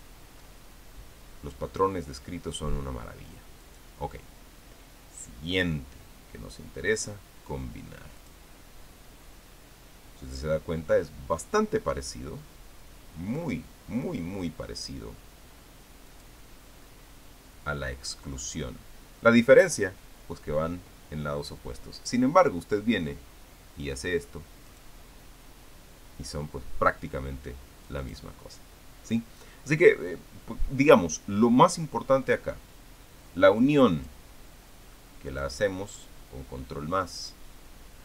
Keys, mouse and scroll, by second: 0.4 ctrl+scroll up 2, 4.4 click, 9.0 click, 16.9 click, 19.2 click, 25.5 click, 28.8 click, 33.1-35.3 drag, 35.3 middle click, 36.1 click, 37.9 click.